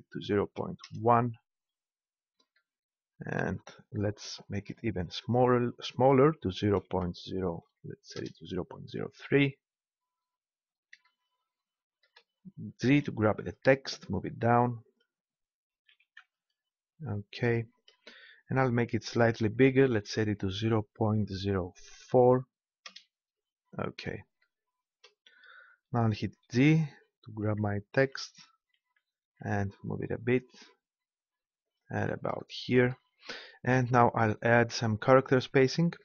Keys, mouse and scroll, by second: 4.6-6.5 drag, 12.9 g, 14.9 click, 15.9 g, 28.7 g, 31.8-33.4 drag, 35.9-36.0 drag.